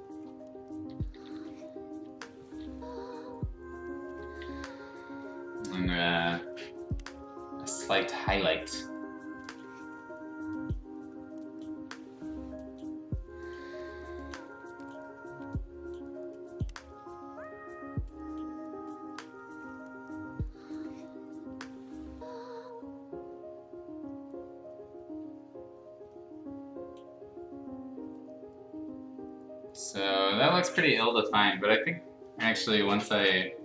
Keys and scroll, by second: 0.0-1.9 typing, 4.2 ctrl+z, 30.6 ctrl+z, 30.9 ctrl+z.